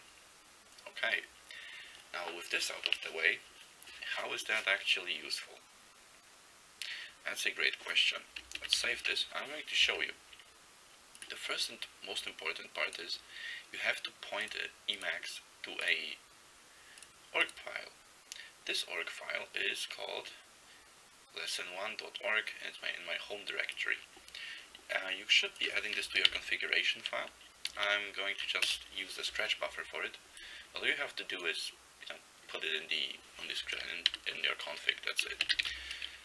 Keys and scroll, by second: 8.7 ctrl+x, 8.8 ctrl+s, 26.3 ctrl+x, 26.3 ctrl+b, 27.8 ctrl+n, 28.1 ctrl+n, 28.7 Return, 34.2-36.2 typing.